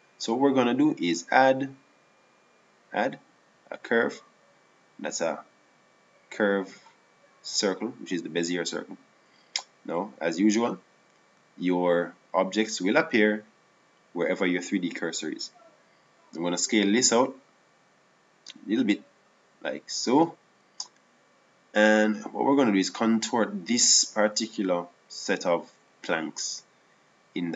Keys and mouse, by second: 1.7-4.9 drag, 17.4 s, 24.7-27.5 right drag.